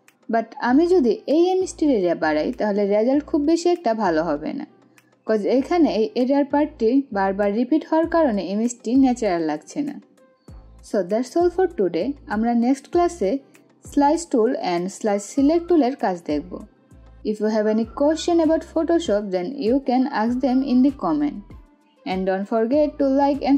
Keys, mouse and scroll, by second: 10.3 click.